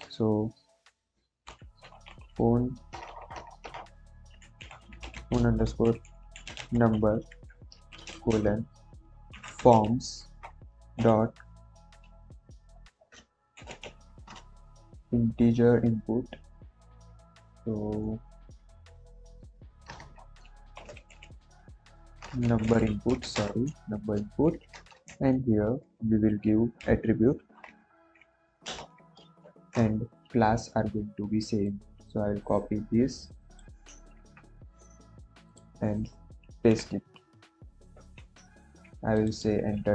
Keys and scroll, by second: 1.2-2.8 typing, 4.0-10.1 typing, 7.2 Right, 10.3 Return, 13.5 shift+i, 13.7 n, 19.8 BackSpace, 20.7 shift+n, 21.0 u, 22.4 Down, 22.6 Down, 22.7 Down, 23.3 Up, 24.4 shift+9, 24.6 shift+0, 25.0 Left, 26.7 a, 27.5 t, 27.6 t, 28.6 Return, 34.1 ctrl+c, 36.5 ctrl+v, 38.5 ctrl+s.